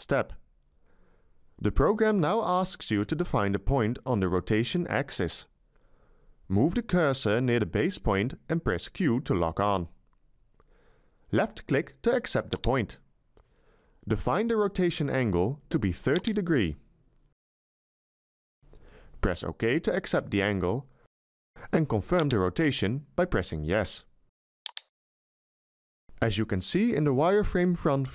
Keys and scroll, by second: 8.9 q, 16.7 3, 17.2 0.